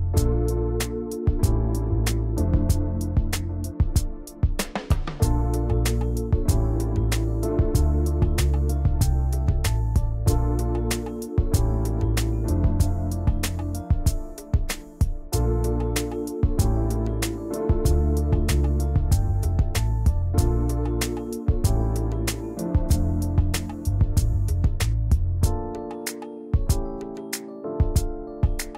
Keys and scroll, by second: 0.1 v.